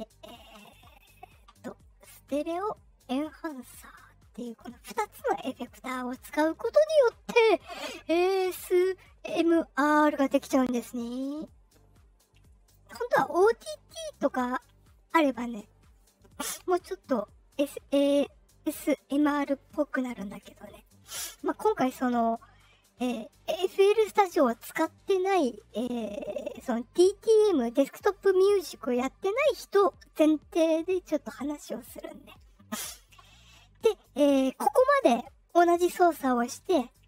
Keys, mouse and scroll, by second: 3.0 click, 4.6-6.8 drag, 7.9-9.9 drag, 11.2-12.6 drag.